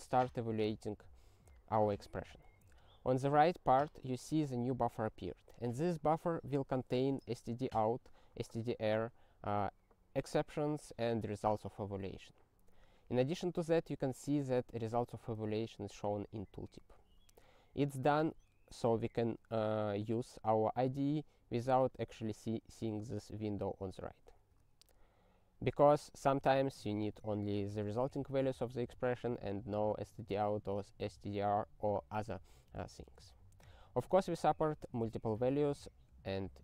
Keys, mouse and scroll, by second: 2.1 ctrl+e, 16.9 super+f, 18.3 ctrl+e, 24.5 super+o, 33.0 ctrl+n, 33.6 ctrl+e, 35.4 ctrl+e.